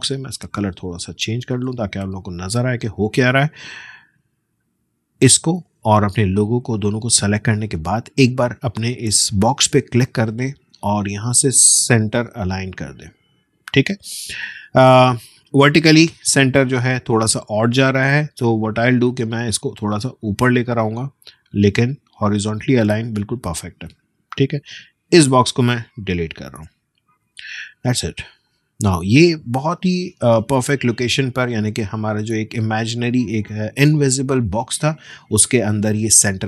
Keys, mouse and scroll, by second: 6.1 shift+click, 9.4 click, 13.3 click, 26.6 BackSpace, 27.8 space, 28.2 click, 28.4 space.